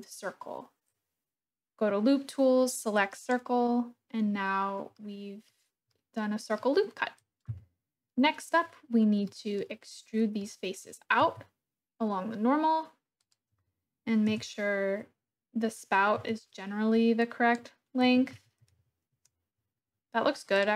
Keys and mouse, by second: 4.9 middle click, 5.9 middle click, 9.2 click, 10.4 click, 11.2 e, 13.2 click, 14.3 KP_1, 16.1 Tab, 17.4 drag, 18.0 r, 18.3 z, 18.6 9, 18.8 0, 19.1 Return.